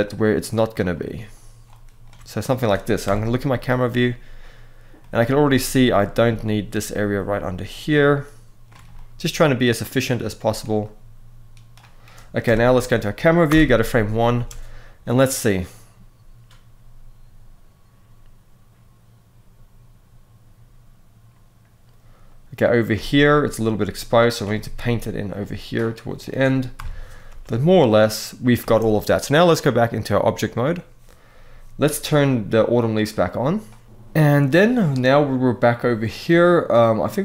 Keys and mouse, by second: 2.7 KP_0, 4.7 middle click, 8.6-9.7 middle drag, 9.9 middle click, 10.5 click, 12.1 KP_0, 13.2 shift+Left, 14.0 space, 22.6 space, 22.9 click, 24.2 middle click, 25.0 click, 26.5 KP_0, 27.0 space, 28.3 space, 29.4-30.4 drag, 32.8 click, 33.6 middle click.